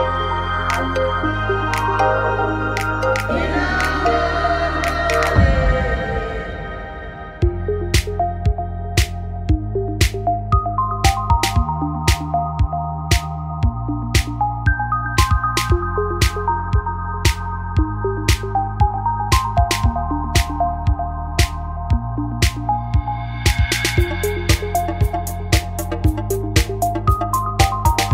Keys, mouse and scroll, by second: 0.4 a, 1.5 z, 11.4-12.7 middle drag, 12.7 click, 13.1 Tab, 13.7 click, 14.6 Tab, 16.7 ctrl+r, 18.5-19.9 right drag, 27.0 middle click.